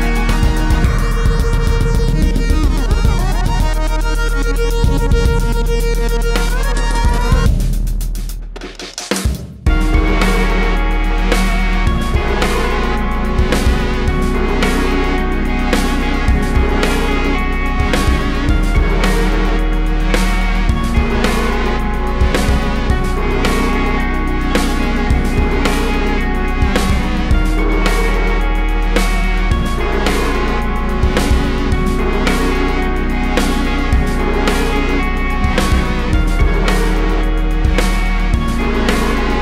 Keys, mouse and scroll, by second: 0.1 `, 3.5-5.4 drag, 5.4 `, 7.1-8.8 drag, 7.5 `, 8.2 Tab, 9.0 Tab, 9.5 g, 10.4 `, 11.2 Tab, 11.9 x, 12.1 Tab, 13.9-15.3 drag, 15.8 g, 18.2 click, 19.9 ctrl+z, 21.7 `, 22.3 s, 23.5 click, 26.3 click, 26.7 Tab, 27.0 click, 27.4 3, 28.5 `, 29.1 click, 29.6 Tab, 29.7 Tab, 29.8 2, 30.0 3, 30.2 click, 30.4 `, 30.7 Tab, 31.2 Tab, 31.6 click, 32.3 1, 32.4 click, 33.4 `, 33.8 3, 34.0 click, 34.3 KP_1, 34.5 KP_3, 34.9 click, 35.6 1, 35.8 a, 36.4 b, 36.8 g, 38.0 right click, 38.2 alt+a, 39.2 b.